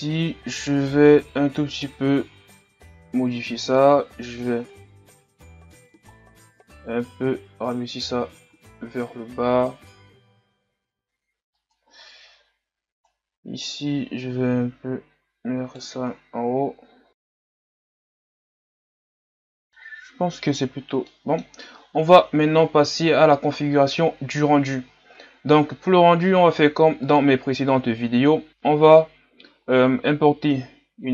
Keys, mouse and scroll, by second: 0.6-3.1 right drag, 3.1 o, 4.2 g, 12.2-12.9 scroll up 2, 12.9 scroll up 1, 13.2-16.2 right drag, 16.2-16.6 scroll down 1, 16.6 Tab, 17.1 scroll down 4, 17.2 Tab, 17.4 Tab, 17.6 scroll up 6, 17.7 Tab, 17.8 right click, 17.9 Tab, 18.0 scroll down 2, 18.1 scroll up 1, 18.2 Tab, 18.4 scroll down 5, 18.6 scroll up 3, 18.7 KP_1, 18.8 Tab, 18.9 click, 19.0 right click, 19.1 click, 19.2 Tab, 19.4 scroll up 5, 19.5-20.7 scroll down 2, 20.7 scroll down 1, 21.1-22.3 middle drag, 22.3 KP_1, 23.1-23.6 scroll down 5.